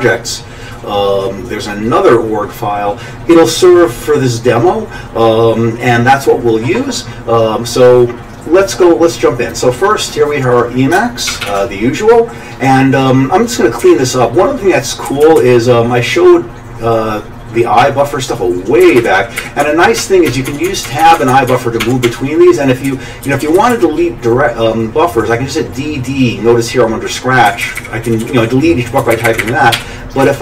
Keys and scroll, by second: 11.3 ctrl+alt+=, 11.4 ctrl+alt+=, 13.8 Up, 15.1 Down, 15.2 Down, 15.4 Down, 18.8 Up, 19.0 Up, 19.4 Up, 19.6 Tab, 20.0 Tab, 20.3 Tab, 20.5 Tab, 21.5 Tab, 22.3 Tab, 22.9 Down, 23.3 Down, 23.4 Down, 23.6 Down, 27.5 Up, 27.6 Up, 27.8 Up, 28.1 Down, 28.2 Down, 29.0 Up, 29.1 Up, 29.3 Up, 29.4 Up, 29.7 d, 30.2 Down.